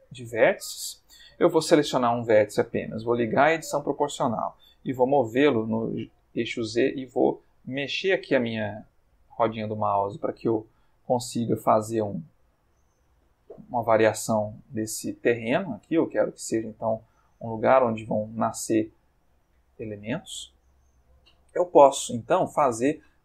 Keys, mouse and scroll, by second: 3.3 o, 5.4 g, 6.0 z, 7.0-7.5 scroll up 2, 7.5-8.1 scroll down 2, 8.5-9.2 scroll down 2, 9.6-10.1 scroll down 2, 10.1-11.4 scroll down 1, 11.4 click, 12.1 click, 12.6 g, 13.2 click, 13.7 click, 13.8 g, 14.5 click, 15.6 ctrl+middle click, 16.4 ctrl+click, 16.6 ctrl+g, 17.4 click, 18.0 click, 18.2 g, 18.6 click, 19.4 click, 19.5 g, 20.3 click, 20.7-21.8 middle drag, 22.1 ctrl+middle click, 22.9 ctrl+Tab.